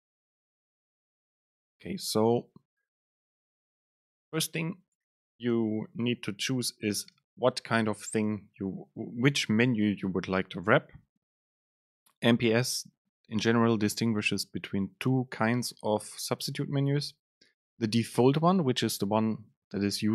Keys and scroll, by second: 1.7 Up, 2.5 Down, 3.4 End, 3.8 Left, 5.0 Down, 7.1 Down, 7.3 super+space.